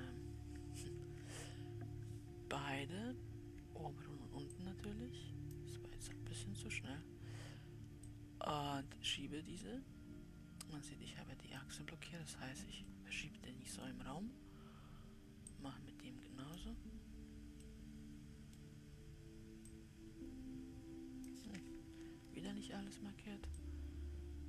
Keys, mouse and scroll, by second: 1.2 ctrl+z, 5.0 shift+click, 8.5-11.6 drag, 12.4 scroll down 3, 13.2-15.8 middle drag, 15.8-18.1 drag, 18.1-20.3 middle drag, 20.3 click, 22.7 ctrl+z, 24.1 click.